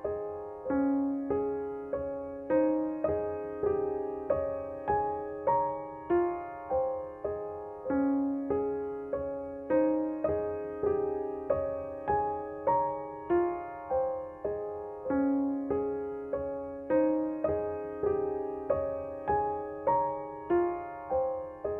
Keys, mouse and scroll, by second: 1.0 alt+click, 4.9 space, 5.8 click, 7.1 ctrl+j, 7.5 ctrl+u, 8.6-13.3 drag, 13.6 space, 13.9 click, 14.1 space, 15.5 click, 17.9 ctrl+u, 18.9-21.2 drag.